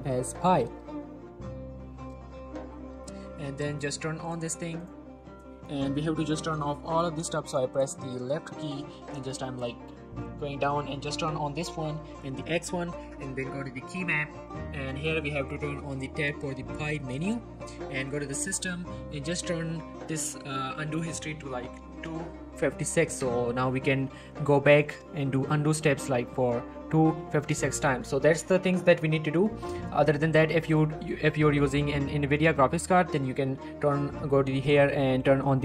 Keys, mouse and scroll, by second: 2.5 typing, 4.2 click, 5.8-6.5 scroll down 1, 6.5-7.8 drag, 8.6-9.1 scroll down 1, 9.1-9.7 click, 9.8-11.2 scroll down 1, 11.2 click, 11.6-12.5 scroll up 1, 12.5 click, 14.3-16.5 scroll up 1, 17.2 click, 20.1 click, 28.3 click, 29.7 scroll down 1, 29.9-30.7 scroll up 1, 30.7 click.